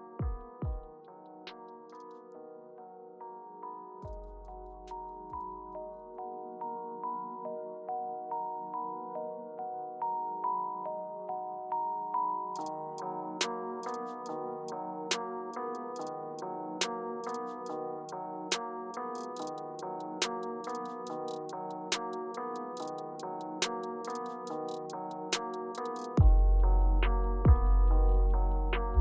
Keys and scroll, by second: 1.9 super+z, 2.2 super+z, 2.7 super+z, 8.9 Return, 11.9 Return, 13.2 Left, 13.9 Return, 18.6 Return, 19.4 Left, 19.7 Return, 22.7 Left, 25.2 Right, 26.2 Left.